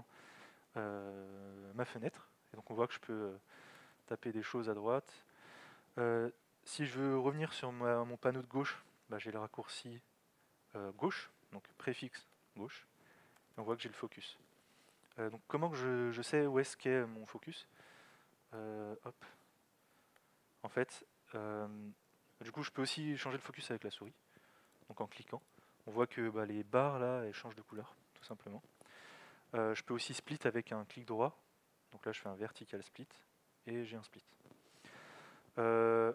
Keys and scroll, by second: 11.7 alt+x, 14.9 alt+x, 15.1 Right, 17.8 alt+x, 18.6 ⊥, 20.2 Left.